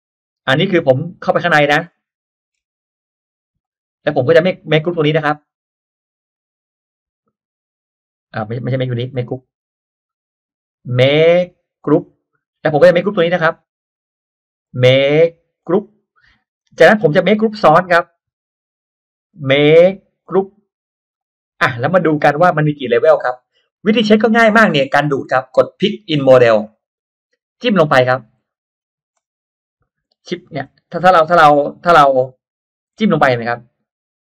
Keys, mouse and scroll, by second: 0.8-1.1 scroll down 1, 1.8 middle click, 2.5 scroll down 1, 2.8 click, 3.5 click, 4.2 middle click, 5.1-5.6 drag, 6.3 right click, 7.1 click, 8.7 middle click, 9.3 ctrl+z, 9.9 click, 10.7 right click, 11.7 click, 12.9-13.9 drag, 14.5 right click, 15.5 click, 16.5 click, 17.4-18.1 drag, 19.2 right click, 20.1 click, 21.1 click, 21.8 middle click, 21.9-22.3 scroll down 1, 22.5 scroll up 1, 22.5 middle click, 22.7 scroll down 1, 23.4-23.7 scroll up 1, 26.5 click, 28.3-28.6 scroll down 1, 28.6 middle click, 29.2 shift+middle click, 29.9 shift+middle click, 31.8 click, 33.1-34.2 shift+middle drag.